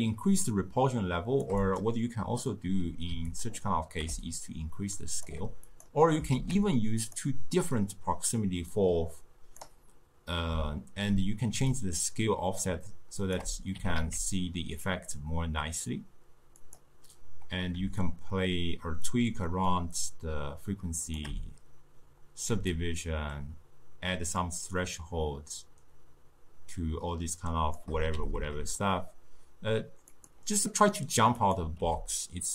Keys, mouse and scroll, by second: 0.0-3.5 shift+drag, 4.3-5.8 shift+drag, 6.4 shift+d, 8.8-13.8 drag, 13.8 g, 18.1-21.2 shift+drag, 22.8-25.9 shift+drag, 28.3 g, 31.5 click, 31.8 g.